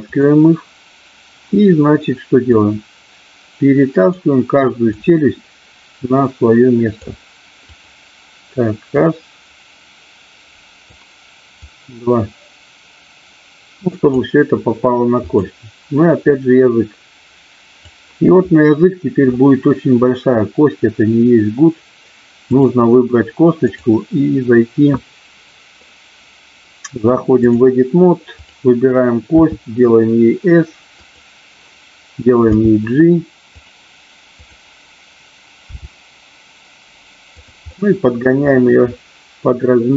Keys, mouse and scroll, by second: 0.2 click, 2.6-4.1 drag, 5.0-7.1 drag, 7.6 click, 9.0-11.0 drag, 11.5-14.2 drag, 16.3-17.8 drag, 23.6-27.5 drag, 29.3 s, 30.8 click, 32.5 g, 34.3 click, 35.6 g, 37.3 click, 37.7 middle click.